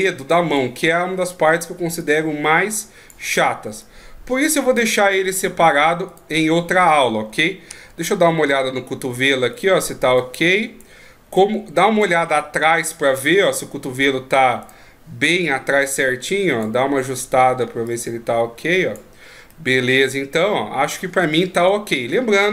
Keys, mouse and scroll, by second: 0.6 click, 2.0 click, 3.8 click, 6.1 right click, 7.8 ctrl+KP_3, 9.5 right click, 10.2 click, 11.4 click, 12.6 ctrl+KP_1, 14.6 right click, 15.4 click, 17.9 click, 19.5 middle click, 21.3-22.5 shift+scroll down 7.